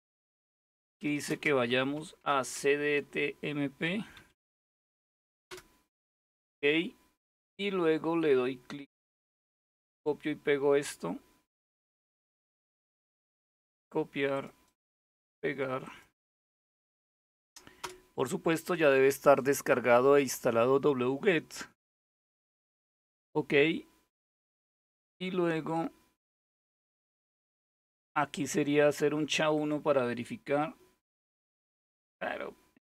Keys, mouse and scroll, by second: 0.4-2.2 typing, 3.5-3.8 typing, 5.1 Return, 8.9-11.8 drag, 12.3 right click, 13.3 click, 14.3 click, 14.3 middle click, 14.5 right click, 15.5 click, 16.7 Tab, 16.9 Right, 17.4 Return, 23.8-24.7 scroll down 1, 29.2 click.